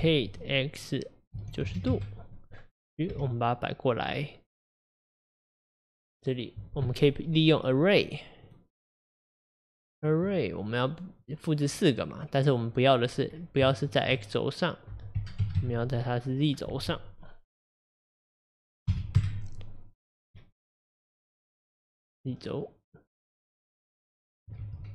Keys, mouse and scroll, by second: 3.1 g, 9.9 click, 19.2 click, 20.1-20.4 scroll down 3, 20.4-23.2 middle drag, 23.2 click, 23.9 click, 24.7 ctrl+z.